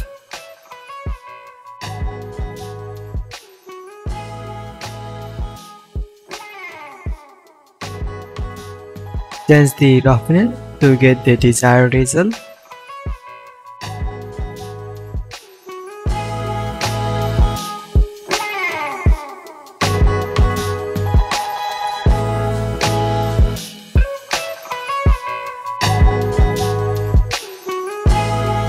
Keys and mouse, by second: 3.9 middle click, 9.9-16.5 middle drag, 17.1 drag, 17.8-20.4 drag, 21.8 drag, 23.2 click, 24.0 shift+a, 24.1-25.3 drag, 25.3-28.3 middle drag, 28.3-28.6 drag.